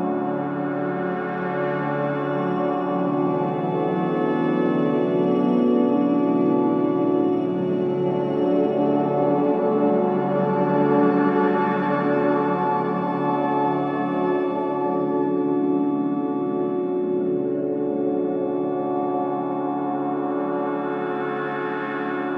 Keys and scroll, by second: 3.1 ctrl+z, 6.5 Delete, 7.4 ], 14.0 Delete, 14.8 4.